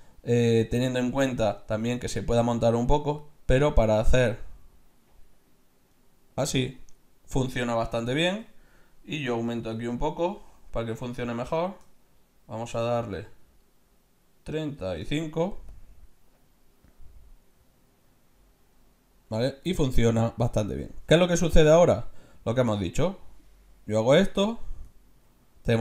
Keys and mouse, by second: 3.2-5.1 drag, 6.8-8.5 middle drag, 8.5 ctrl+z, 9.3-11.1 drag, 15.7-17.6 drag, 21.6 ctrl+z, 22.3-24.2 drag, 24.8-25.8 middle drag.